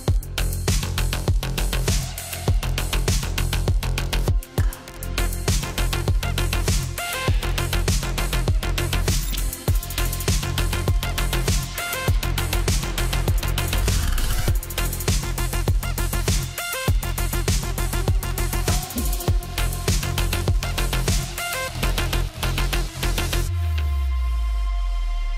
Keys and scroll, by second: 0.0-3.2 typing, 4.4-4.7 typing.